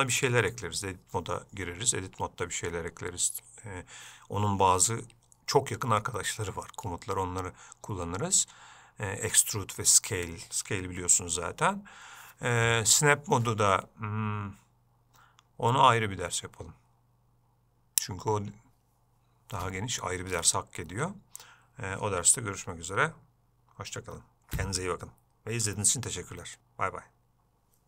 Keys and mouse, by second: 27.1 middle click.